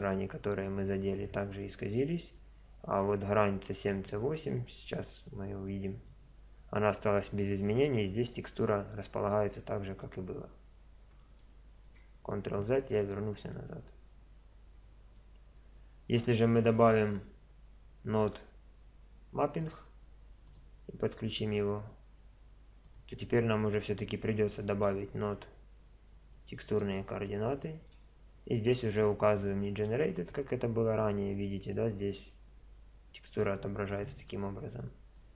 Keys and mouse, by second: 4.0 middle click, 8.7-9.9 middle drag, 10.4-11.4 middle drag, 11.4 ctrl+z, 14.5 middle click, 19.6 shift+a, 22.8-24.8 drag, 24.8-26.8 middle drag, 26.8 shift+a, 30.3 click, 30.4-35.0 drag.